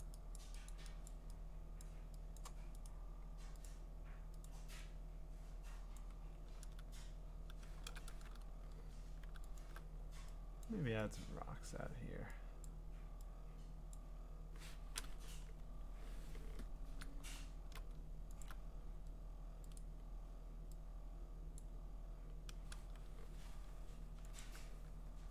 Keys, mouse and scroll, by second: 0.0 click, 0.4 click, 0.7 click, 1.1 click, 1.8 click, 2.4 click, 2.9 right click, 3.7 click, 4.5 click, 6.0 click, 6.6 ctrl+z, 9.6 alt+click, 10.6 click, 11.7 click, 12.7 click, 13.9 click, 15.2-16.5 ctrl+scroll, 17.4-18.4 scroll, 18.4 click, 19.8 click, 21.6 click, 24.4 alt+click.